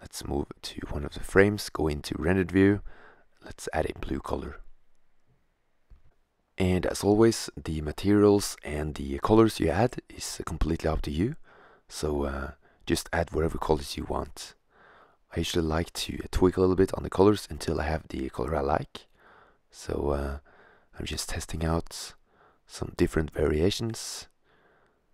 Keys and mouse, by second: 0.1 shift+z, 2.1-3.1 drag, 6.1-6.7 middle drag, 10.4 click, 12.4 middle click, 15.7 right click, 16.2 click, 19.7 middle click, 23.1 click.